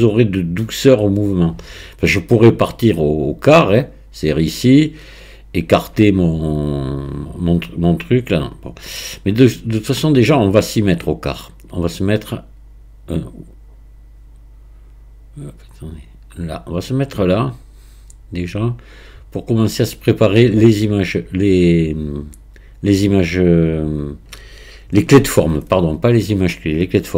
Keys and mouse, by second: 3.8-5.7 drag, 8.0-19.7 drag.